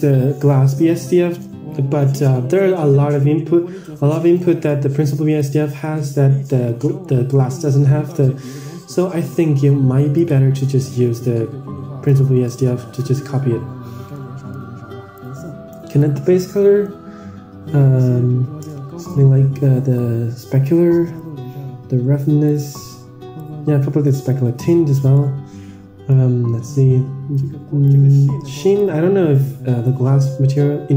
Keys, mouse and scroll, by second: 0.6-1.1 middle drag, 1.5-2.2 middle drag, 4.3 middle click, 5.3 click, 5.7-6.1 middle drag, 6.4-6.7 middle drag, 6.7 scroll down 2, 6.9 middle click, 7.6 shift+d, 13.1-14.0 scroll up 9, 14.1 middle click, 15.1-16.2 drag, 16.6-17.3 middle drag, 19.0-20.3 drag, 21.4 click, 23.6-25.2 drag, 25.5-26.5 middle drag, 27.8-28.9 drag, 30.2-30.9 drag.